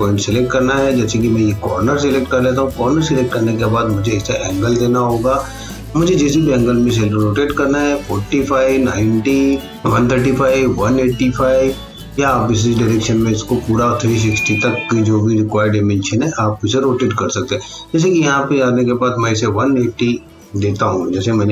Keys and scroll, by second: 21.2-21.5 typing.